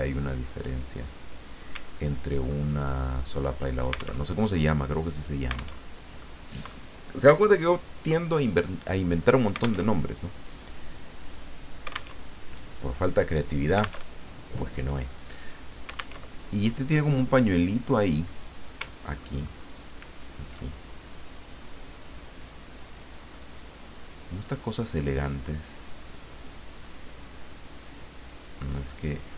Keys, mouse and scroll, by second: 2.4 ctrl+scroll up 2, 2.8-3.5 ctrl+scroll down 4, 4.2 alt+Tab, 5.8 alt+Tab, 6.3 click, 9.8 alt+Tab, 12.2 alt+Tab, 14.0 alt+Tab, 16.2 alt+Tab, 18.4 click, 19.1-19.7 ctrl+scroll up 2, 20.2 ctrl+scroll down 2, 24.3 click, 25.3 click, 26.7 click, 27.7 click.